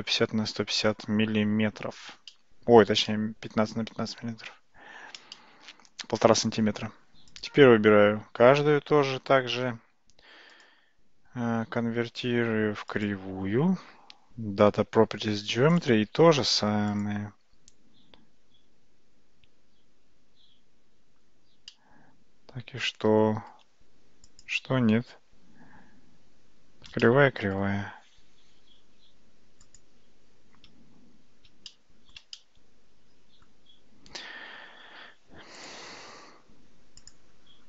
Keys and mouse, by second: 0.9-2.0 middle drag, 2.3-2.9 shift+middle drag, 3.1-4.5 middle drag, 5.4-6.1 shift+middle drag, 7.4 click, 10.6-13.1 drag, 21.8-23.5 middle drag, 24.4 click, 27.1-27.6 middle drag, 29.7 click, 31.7-32.2 shift+middle drag, 32.5-33.5 middle drag, 35.6 click.